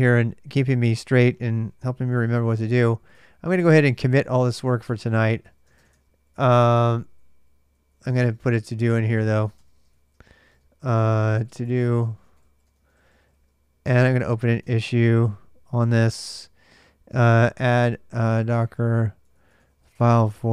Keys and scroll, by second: 1.6-6.1 typing, 4.7 Return, 6.8 ctrl+[, 6.8 ctrl+j, 7.3-8.6 typing, 9.4 Return, 9.7-15.3 typing, 15.6 Return, 16.7-20.5 typing.